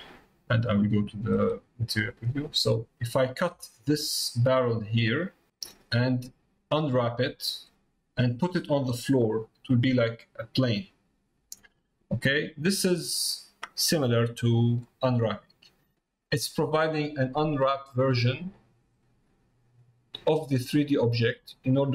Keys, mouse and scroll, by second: 1.5 click, 2.3 middle click, 3.7 middle click, 5.5 middle click, 12.5 middle click, 13.8 middle click, 15.0 middle click, 15.9 middle click, 21.0 middle click.